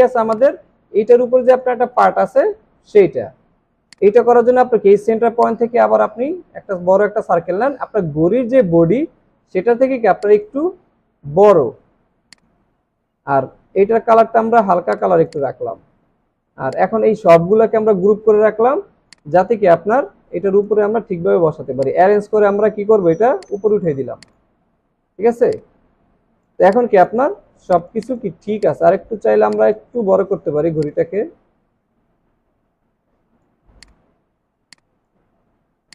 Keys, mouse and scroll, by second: 5.4 alt+shift+click, 15.3 double click, 18.4 ctrl+g, 21.8 right click, 23.6 right click, 25.0 alt+scroll up 1, 26.0 space, 27.3 alt+w, 27.4 alt+scroll down 2, 29.0 alt+scroll up 1, 29.4 space, 34.5 alt+scroll down 1, 35.3 alt+scroll up 2.